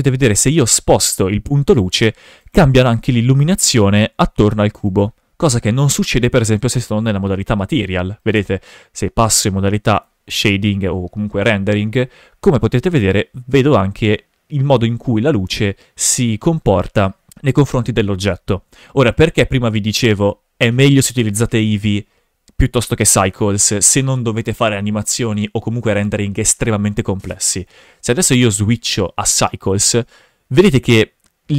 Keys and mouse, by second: 2.4 right click, 2.6 shift+f, 3.8 g, 4.8 right click, 6.1 click, 6.6 g, 8.2 right drag, 9.9 click, 11.5 g, 16.8 right drag, 17.4 shift+f, 28.4-29.5 drag, 30.1 g.